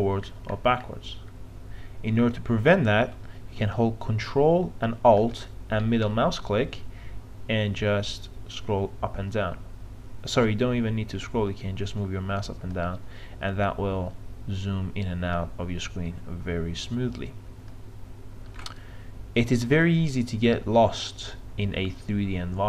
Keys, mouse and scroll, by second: 0.3-1.3 scroll down 1, 1.3-4.2 scroll up 1, 6.2-19.2 ctrl+alt+middle drag.